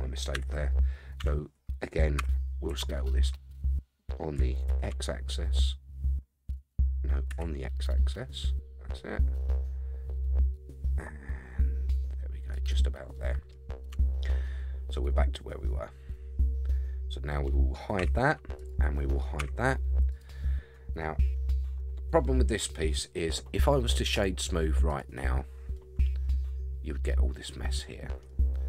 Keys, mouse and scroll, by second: 0.3 KP_1, 1.2 Tab, 2.2 a, 2.7 s, 13.0 scroll down 1, 13.1 middle click, 13.9 Tab, 14.4-15.1 middle drag, 15.2-15.6 scroll up 4, 15.6-17.1 middle drag, 18.0 h, 18.6 click, 19.4 h, 20.1 click, 21.3-22.9 middle drag, 24.1 right click, 25.7-28.3 middle drag.